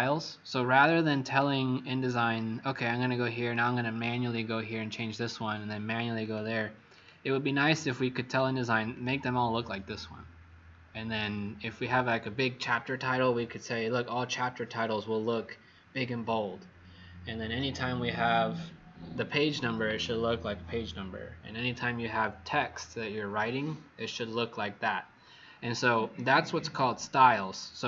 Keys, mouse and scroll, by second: 7.5 click, 8.2 click, 8.9 click.